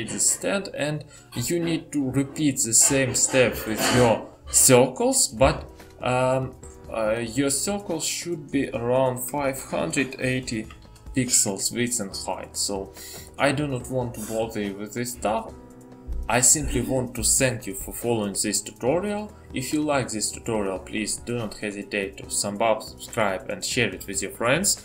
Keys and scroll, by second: 12.5 typing.